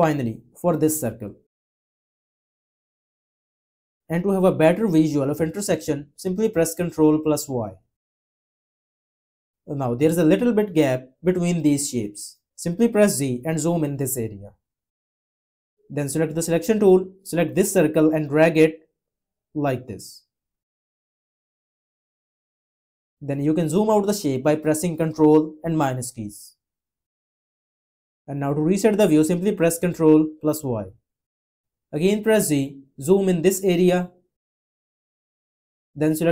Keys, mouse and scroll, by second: 7.1 ctrl+y, 13.3 z, 25.1 -, 30.4 ctrl+y, 32.5 z.